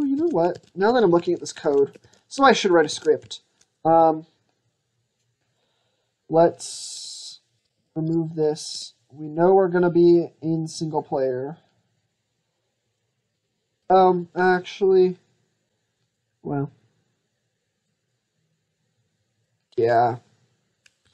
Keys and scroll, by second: 0.0 ctrl+z, 0.4 ctrl+z, 0.7 ctrl+z, 1.1 ctrl+z, 1.5 ctrl+z, 1.9 ctrl+z, 2.3 ctrl+z.